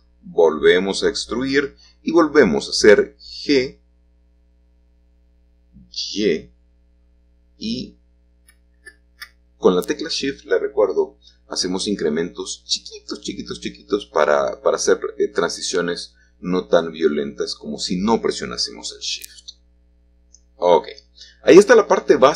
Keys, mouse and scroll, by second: 0.7-2.5 drag, 3.9-4.9 middle drag, 13.2 click, 13.7-14.3 scroll down 1, 14.3 middle click, 14.9-17.4 scroll down 1, 17.4-20.4 middle drag, 20.4 typing.